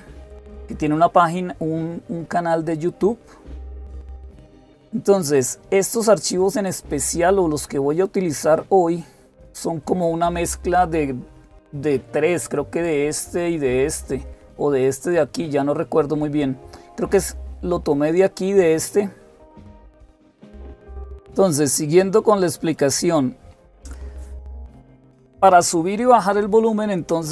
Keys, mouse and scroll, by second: 14.6 click, 17.8-18.5 scroll down 2, 18.5-22.4 scroll down 1, 22.4 click.